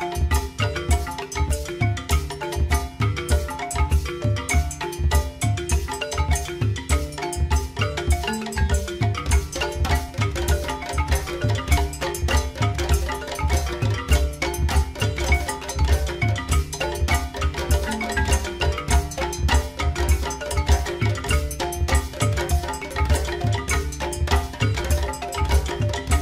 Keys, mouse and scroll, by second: 1.2 KP_3, 2.8 g, 7.1 g, 13.4 click, 20.1 shift+d.